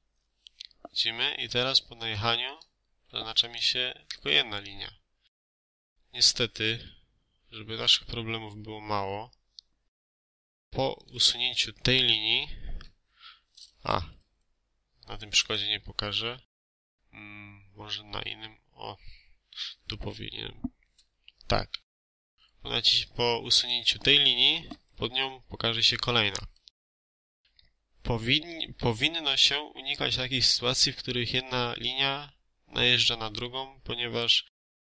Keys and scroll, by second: 2.9 Escape, 12.7 Delete, 13.7 ctrl+z, 15.5 Escape, 20.9 Delete, 22.1 ctrl+z, 24.6 Delete.